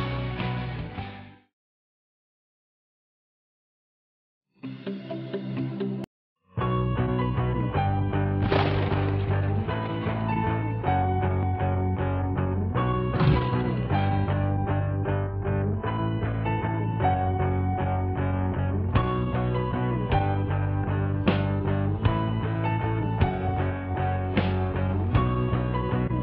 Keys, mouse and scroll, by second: 6.7-12.9 middle drag, 13.1 click, 14.7 scroll down 1, 15.2 scroll up 1, 15.4 scroll down 1, 15.7 scroll up 1, 16.6 scroll down 1, 17.3-20.6 middle drag, 20.6-23.0 drag, 23.9-24.2 scroll up 1, 24.7-26.1 middle drag.